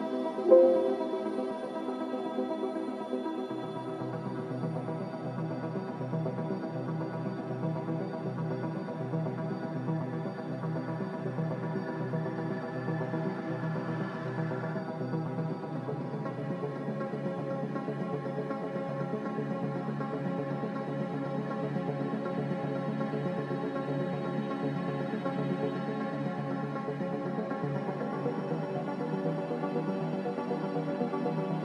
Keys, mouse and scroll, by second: 2.2-3.0 typing, 7.2-9.0 typing, 11.5 Escape, 14.5 Escape, 14.6 Escape, 14.7 Escape, 17.5 z, 21.4 5, 21.9 Return.